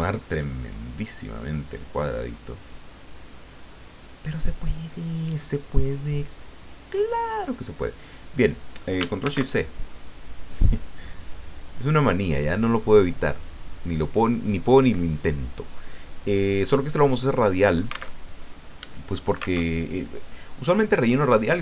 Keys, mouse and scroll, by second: 0.0-0.5 ctrl+scroll up 2, 4.0-7.1 drag, 9.2 ctrl+shift+c, 11.7 click, 13.0-13.3 scroll down 2, 13.9 click, 17.1 click, 18.1 alt+Tab, 19.6 alt+Tab.